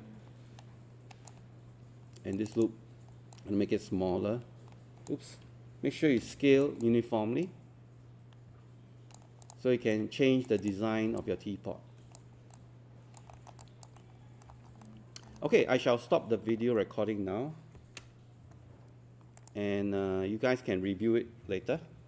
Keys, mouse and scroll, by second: 6.2 z, 6.6-9.3 alt+drag, 9.9 right click, 10.6 click, 11.0 scroll down 1, 11.2 alt+click, 12.6 alt+click, 13.4 alt+middle click, 13.6 alt+click, 14.0 alt+middle click, 14.6 scroll up 1, 14.8 alt+middle click, 19.4 click.